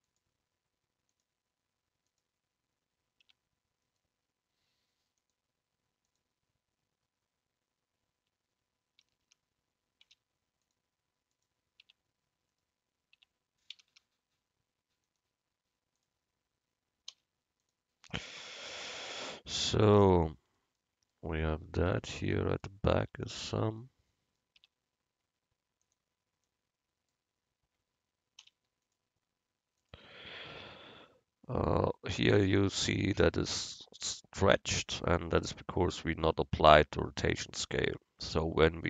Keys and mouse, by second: 1.2-3.1 drag, 3.3 Tab, 5.3-7.3 drag, 5.3-6.5 right drag, 8.4 Tab, 9.1 a, 9.4 a, 10.1 u, 11.9 Tab, 13.3 Tab, 13.8 a, 14.0 a, 15.1-17.0 drag, 17.2 u, 19.4-20.7 drag, 23.1 Tab, 24.1-25.1 drag, 24.7 Tab, 28.5 u, 30.4 Tab.